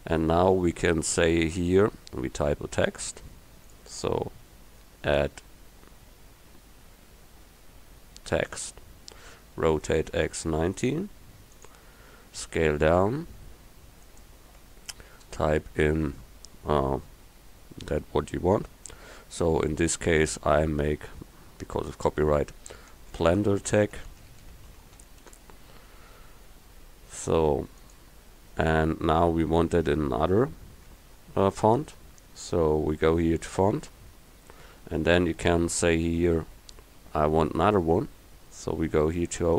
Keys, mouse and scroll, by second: 3.7-5.8 drag, 9.9 r, 12.5 s, 14.7 Tab, 15.7 BackSpace, 16.0 BackSpace, 16.1 BackSpace, 16.3 BackSpace, 23.0-25.3 typing, 29.8 Tab.